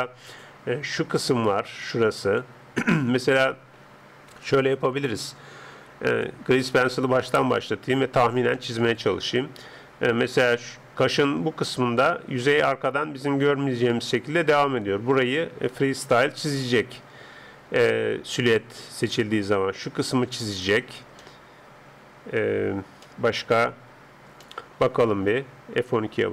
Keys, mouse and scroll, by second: 0.3 click, 3.2-10.4 middle drag, 3.2 d, 4.4 n, 6.1-8.1 drag, 6.7 n, 7.8 right click, 10.2-11.1 d, 10.4-11.1 scroll up 1, 11.1 click, 14.2 d, 16.1-18.3 middle drag, 16.1 d, 17.7-20.8 d, 19.5 click, 21.2-26.3 middle drag.